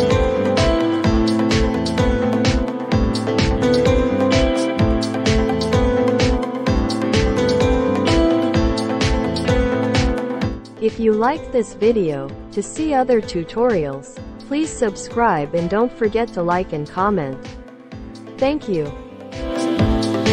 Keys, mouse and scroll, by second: 7.6-9.0 drag.